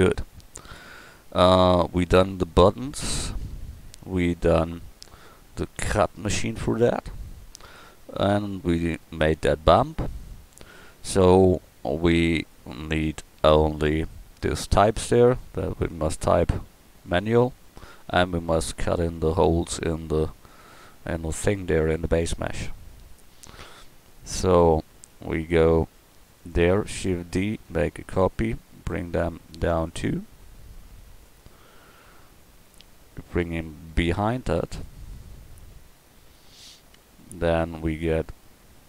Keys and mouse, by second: 1.1 middle click, 22.6 KP_1, 26.4 right click, 27.3 shift+d, 32.7-34.8 drag, 35.6 KP_1.